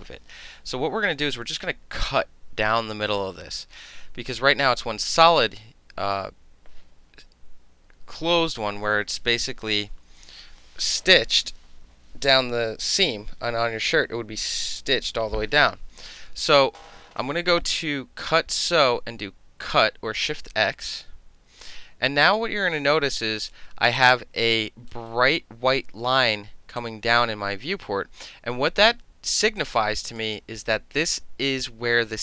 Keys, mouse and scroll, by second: 18.2 click, 20.8 click, 22.2-22.7 drag, 23.4 right click, 24.0 right click, 24.5-24.9 alt+drag, 24.9 alt+middle click, 25.3-26.8 alt+middle drag, 26.8-29.3 alt+drag, 29.6 alt+click, 30.3 alt+right click.